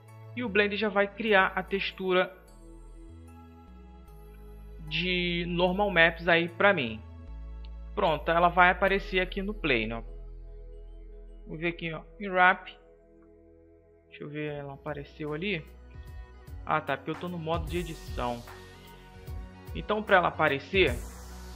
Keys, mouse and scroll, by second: 3.2 n, 7.8-10.3 middle drag, 10.3 KP_7, 12.4 u, 16.2 Tab, 16.7-17.1 middle drag, 19.2 Tab.